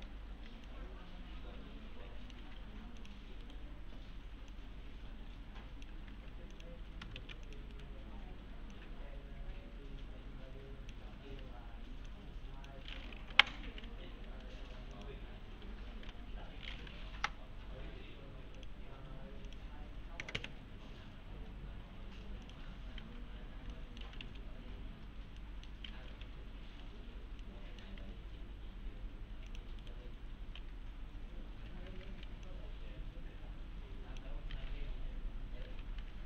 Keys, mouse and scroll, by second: 0.7-2.5 alt+middle click, 2.4 alt+1, 3.0 click, 3.5 right click, 4.5-6.1 click, 6.2 alt+1, 6.5 click, 7.2 ctrl+z, 7.5 click, 7.7 right click, 8.7-11.2 click, 11.7 1, 12.1-12.7 click, 14.0 1, 14.9 click, 15.7-16.6 typing, 17.1 Return, 18.6 click, 22.4 click, 23.7 middle click, 23.8-24.7 typing, 24.5 scroll down 1, 25.1-25.4 scroll up 1, 25.4 middle click, 26.1 F4, 27.4-28.0 middle click, 28.0 alt+1, 29.5 click, 29.8 right click, 30.6 2, 32.0 alt+`, 32.5-34.3 click, 36.0 alt+1.